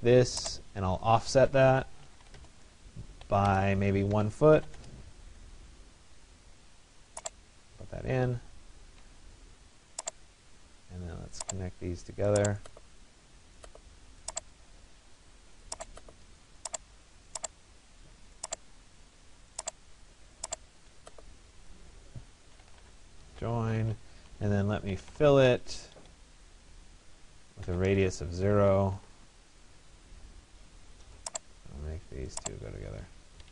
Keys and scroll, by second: 2.1 Return, 4.2 1, 4.8 Return, 23.5 Return, 28.4 0, 29.0 Return, 32.9 Escape.